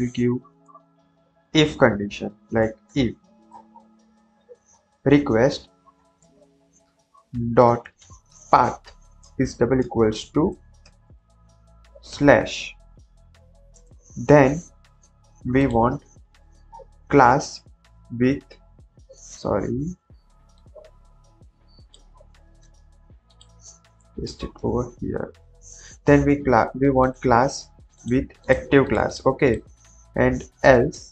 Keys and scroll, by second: 0.6 Return, 0.9 Down, 1.0 Up, 2.4-3.3 typing, 3.4 Return, 5.3-10.4 typing, 11.1 Left, 12.0 /, 12.8 Right, 12.9 Right, 13.1 Right, 13.2 Right, 13.6 Return, 16.6 alt+Up, 17.6 Right, 18.2 Right, 18.2 Right, 18.4 Right, 18.9 Right, 22.5 ctrl+x, 24.0 Return, 24.3 ctrl+v, 25.2 Up, 27.2 Tab, 30.6 Return, 30.8-31.1 typing.